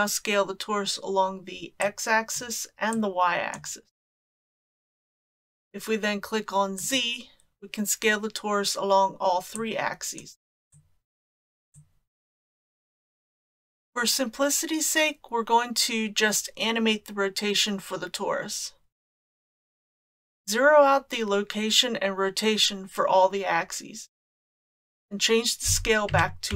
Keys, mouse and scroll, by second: 1.9 click, 3.0 click, 6.8 click, 9.6 click, 10.7 click, 11.7 click, 24.3 click.